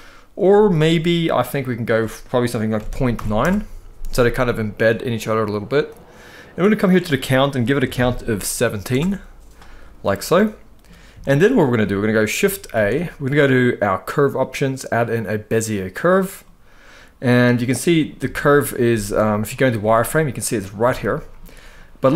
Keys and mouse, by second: 0.2 middle click, 1.4-3.1 drag, 4.2-5.6 middle drag, 6.5-8.6 drag, 9.9-10.6 middle drag, 10.9-11.3 shift+middle drag, 11.5 middle click, 12.4 shift+a, 16.1-16.9 middle drag, 18.0 shift+middle drag, 18.6 z, 19.5 middle drag, 20.7-21.1 shift+middle drag.